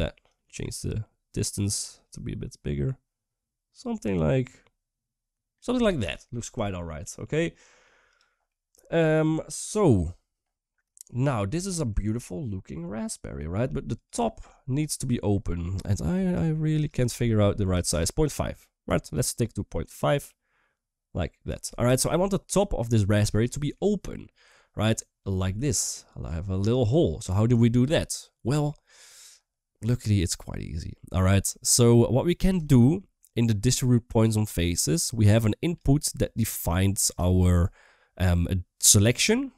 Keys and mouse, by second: 0.2-5.3 shift+drag, 6.4 shift+middle drag, 6.8-7.2 middle drag, 7.2-7.5 drag, 7.8 click, 8.3-8.9 middle drag, 10.7 shift+middle drag, 11.4 shift+middle drag, 12.1-13.1 middle drag, 14.7 shift+middle click, 16.2-17.7 shift+drag, 18.9-21.3 shift+drag, 21.7 shift+middle drag, 22.1-22.9 middle drag, 23.3 shift+middle click, 25.4 click, 25.4 d, 27.6 d, 28.5 middle drag, 31.1 middle click, 32.6 shift+middle click, 33.2 click, 33.4 click, 35.0 click, 35.2 click, 37.2 shift+middle click, 38.8-39.5 drag.